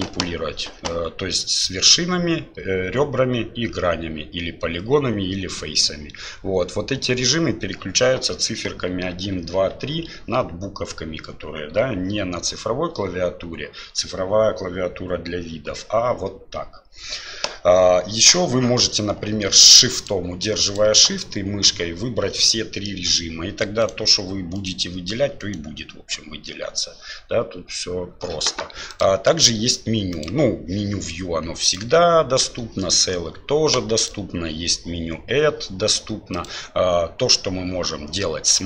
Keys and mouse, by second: 20.0 shift+click, 22.4 middle click, 25.4 click, 30.3-32.9 drag.